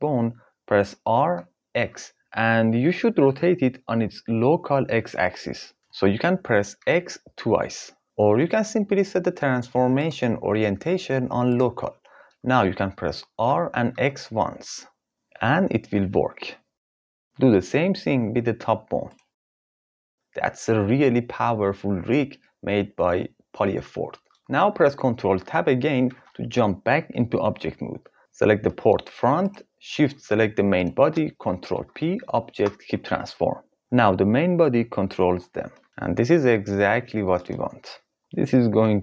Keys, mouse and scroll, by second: 0.8 r, 1.3 x, 6.3 x, 9.6-11.5 drag, 14.8 r, 18.2 r, 18.7 x, 24.3 ctrl+s, 25.6 ctrl+Tab, 29.0 click, 30.3 shift+click, 31.3 ctrl+p, 34.4 g, 36.7 click.